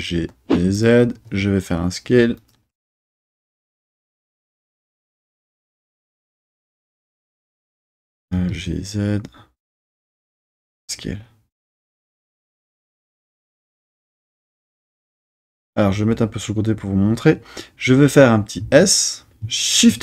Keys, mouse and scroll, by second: 0.7 click, 1.1 s, 2.3 click, 8.2 g, 10.1 click, 10.5 s, 11.8 click, 12.4 g, 12.7 z, 14.4 click, 18.6 s, 19.7 shift+z.